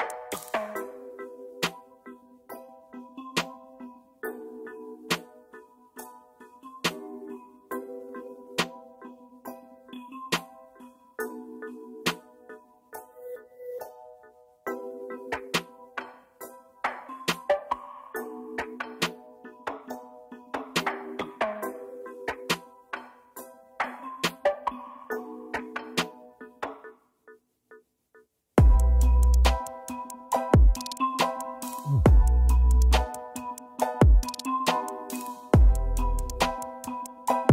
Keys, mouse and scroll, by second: 4.4-4.9 scroll down 1, 8.3 double click, 21.2 ctrl+z, 22.1 double click, 26.9 Down, 27.0 Down, 27.5 Down, 28.0 Down, 28.8 scroll down 1, 29.5 z.